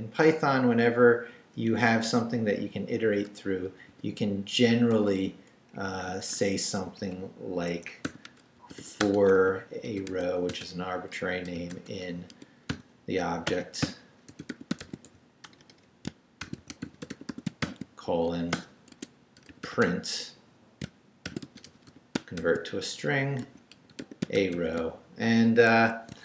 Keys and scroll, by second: 1.7 Left, 3.9 i, 4.6 shift+i, 4.9 shift+3, 5.3 shift+Left, 5.7 Down, 6.2 shift+3, 6.6 shift+Up, 7.7 Escape, 7.8-18.1 typing, 18.5 shift+Return, 19.2-24.9 typing, 25.7 shift+Escape, 26.1 shift+Escape.